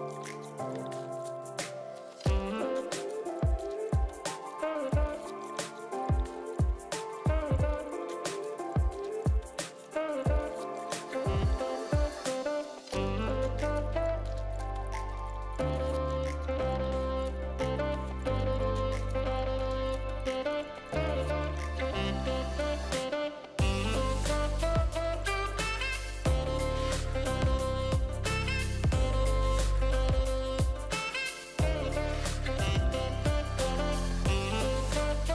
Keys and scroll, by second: 13.8 ctrl+z, 17.6 v, 25.7 v, 31.8 r, 33.4 ctrl+d, 33.5 ctrl+d, 33.7 ctrl+d, 34.7 v.